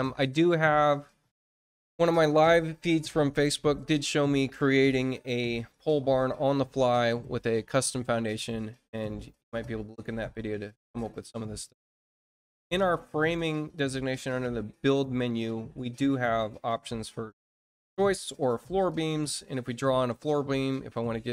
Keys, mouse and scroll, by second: 10.9 click, 18.8 click, 20.4 click.